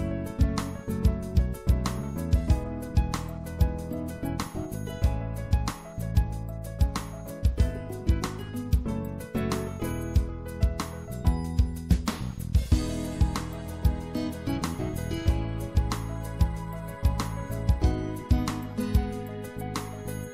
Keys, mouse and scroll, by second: 0.5-2.8 drag, 2.8-9.8 middle drag, 10.2 click, 11.5-14.7 middle drag, 16.1 middle click, 16.9-20.3 middle drag.